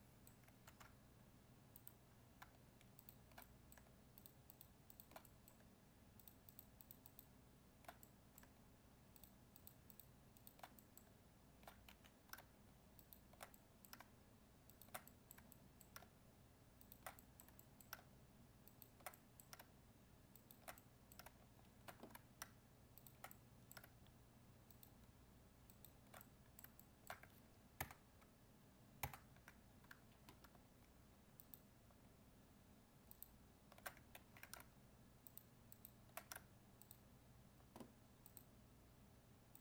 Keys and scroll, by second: 0.6 ctrl+Tab, 27.8 ctrl++, 34.1 ctrl+z.